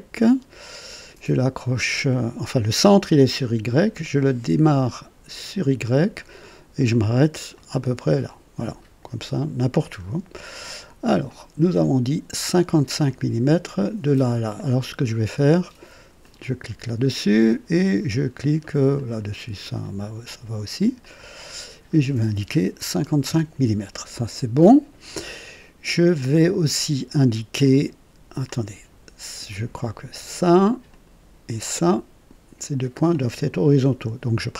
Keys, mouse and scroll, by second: 5.4 click, 7.5 click, 9.2 right click, 10.0 scroll up 2, 10.5 right click, 11.3 right click, 12.8 click, 14.5 click, 16.2 click, 18.9 click, 21.0 click, 22.8 KP_5, 23.0 KP_5, 23.3 Return, 27.6-29.1 drag, 29.5 click, 30.9 click, 32.7 click.